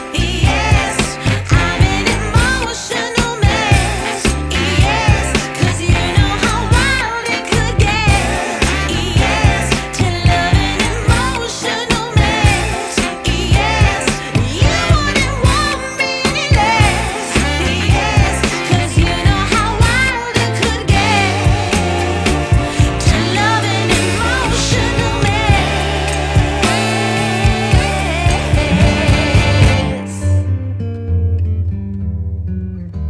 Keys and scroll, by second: 30.9 Return.